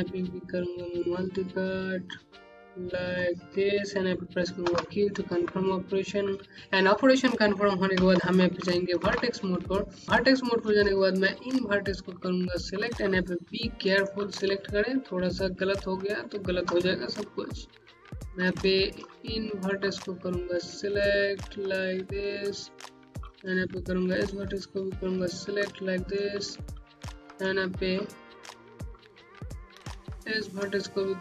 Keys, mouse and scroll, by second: 1.4 click, 4.5 q, 5.4 scroll down 2, 6.5-7.2 scroll up 1, 8.9 2, 9.8 scroll up 1, 10.0 right click, 11.3 click, 11.9 middle click, 13.1 middle click, 16.0 click, 16.7-17.1 scroll down 2, 17.3 click, 19.1 click, 21.9 click, 22.4 middle click, 24.7 click, 25.2 scroll down 1, 25.7 alt+middle click, 25.8-26.5 typing, 26.2-26.6 scroll up 1, 28.2 middle click, 28.3-29.0 typing, 29.3-30.0 scroll up 1.